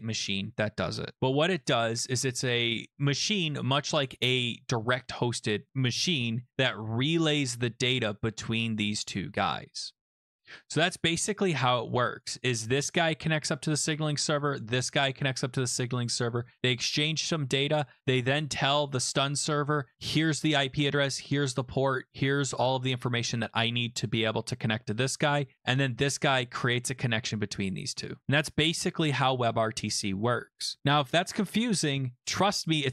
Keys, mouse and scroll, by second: 3.4 click, 11.8 click, 12.2 click, 12.7 click, 13.6 click, 14.5 click, 15.3 click, 18.4 click.